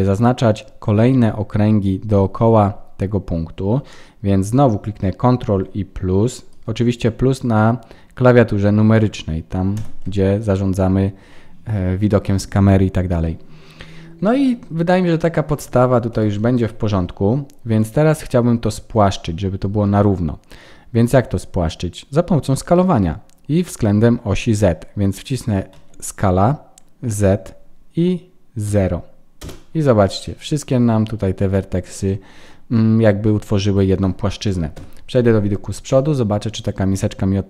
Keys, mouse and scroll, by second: 9.7 ctrl+KP_Add, 14.2 middle click, 14.6-15.7 scroll down 6, 16.1 KP_1, 30.2 middle click, 33.4 middle click, 34.7 KP_1.